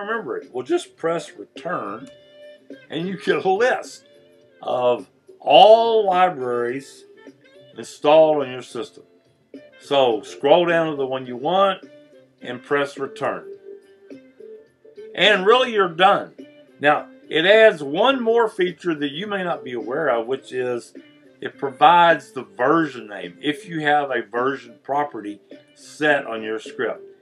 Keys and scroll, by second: 2.0 Return, 9.3 Down, 13.2 Return.